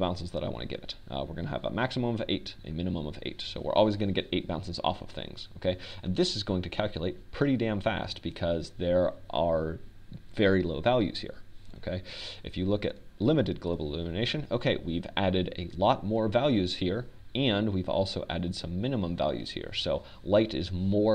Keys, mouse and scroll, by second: 7.5-7.8 middle drag, 14.9-16.9 drag.